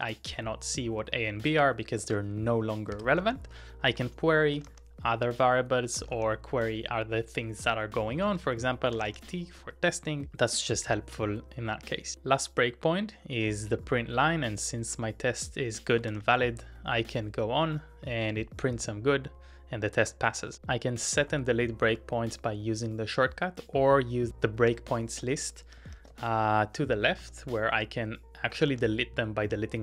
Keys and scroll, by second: 1.4-10.8 typing, 15.0-16.6 typing, 19.1-22.6 typing, 20.5 ctrl+w, 24.5-28.7 typing.